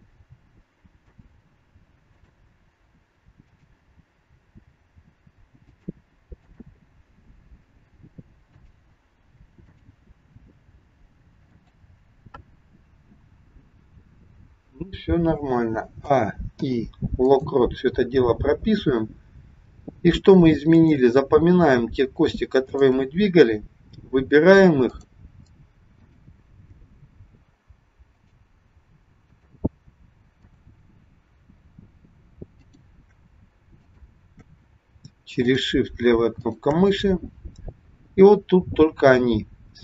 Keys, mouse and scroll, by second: 0.4 g, 2.1 click, 3.3 click, 4.7 g, 6.4 click, 7.6 g, 9.6 click, 10.6 g, 16.0 a, 16.6 i, 20.7 click, 22.7 shift+click, 33.7 shift+click, 36.6 shift+click, 39.7 click.